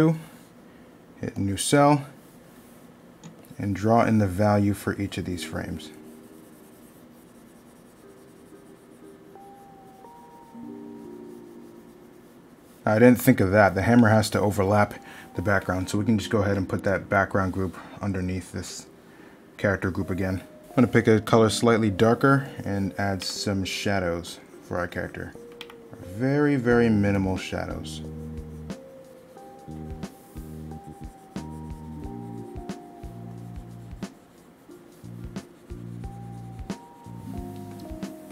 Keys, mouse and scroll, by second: 2.0 middle click, 13.4 middle click, 20.4 middle click, 30.6 middle click.